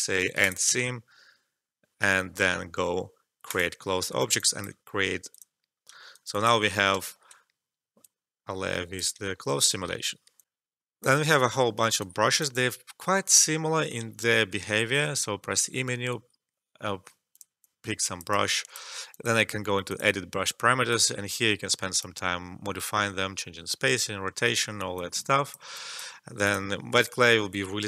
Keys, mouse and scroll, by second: 3.4 click, 4.3 alt+click, 5.8 alt+click, 6.1 alt+right click, 6.3 alt+click, 7.0 alt+middle click, 8.0-9.4 drag, 9.4 alt+right click, 10.4 alt+F12, 11.0 click, 12.0 right click, 12.5-14.0 drag, 14.0 e, 17.2-24.2 drag, 24.9-27.8 drag.